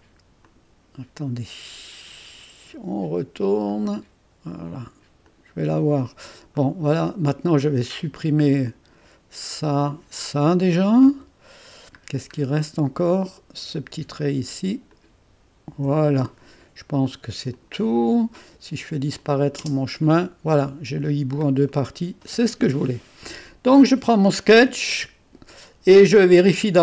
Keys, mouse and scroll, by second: 0.4 click, 3.7 click, 5.2 click, 6.5-8.0 middle drag, 8.0 click, 9.8 click, 10.5 click, 11.1 Delete, 12.0 scroll down 1, 12.6 click, 14.9-15.9 drag, 15.7 Delete, 17.5 click, 19.1-20.6 drag, 19.6 space, 21.1-21.7 scroll down 1, 21.7-23.8 middle drag, 23.8 click.